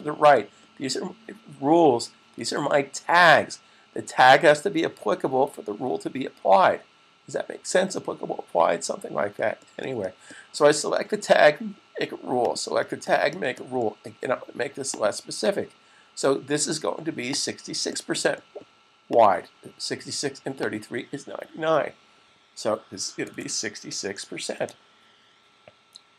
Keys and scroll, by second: 22.6 typing, 23.8 typing.